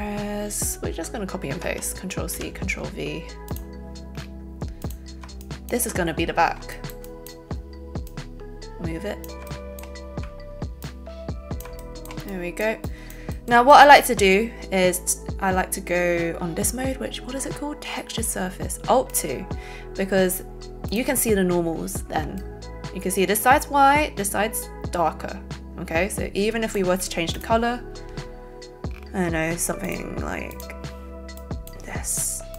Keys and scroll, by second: 1.6 ctrl+c, 2.3 ctrl+v.